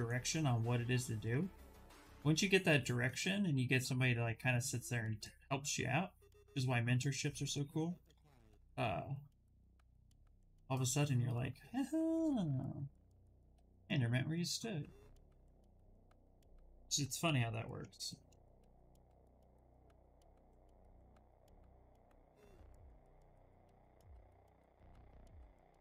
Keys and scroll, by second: 12.9 b, 13.3 d.